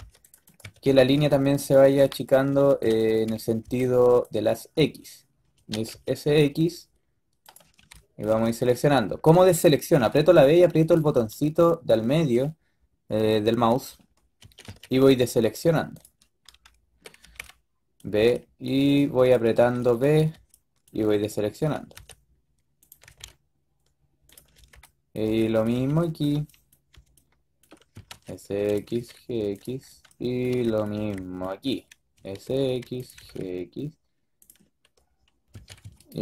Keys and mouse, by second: 0.0-0.9 typing, 3.5 b, 5.4 s, 7.6 b, 8.2 b, 9.8 b, 11.0 b, 14.3 s, 17.1-20.2 typing, 21.4 s, 22.8 g, 24.4-26.8 typing, 27.8 s, 28.7 g, 29.7 b, 30.4 b, 30.8 b, 32.0 s, 33.0 g, 35.5-36.2 typing.